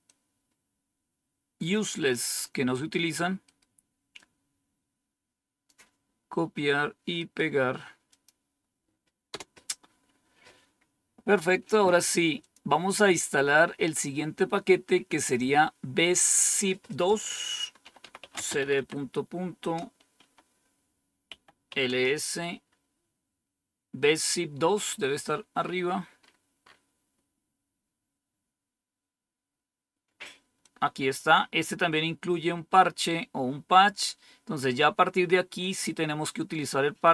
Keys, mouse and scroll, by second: 0.0-2.4 drag, 4.1-5.6 drag, 8.0 click, 9.2 Return, 12.3 click, 16.8 click, 17.9-19.5 typing, 21.2-21.8 typing, 25.2-25.6 scroll up 2, 26.1-26.7 scroll up 3, 30.5-31.7 drag, 36.9 click.